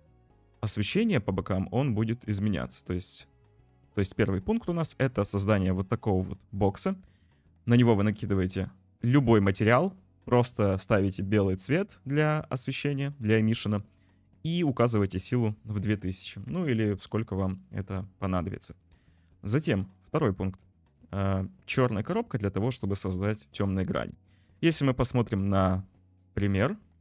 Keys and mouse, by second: 0.8 g, 4.4 middle click, 4.8 click, 6.7 click, 7.4 click, 8.5 click, 10.9 click, 15.9 `, 16.6 ctrl+s, 20.8-23.1 drag.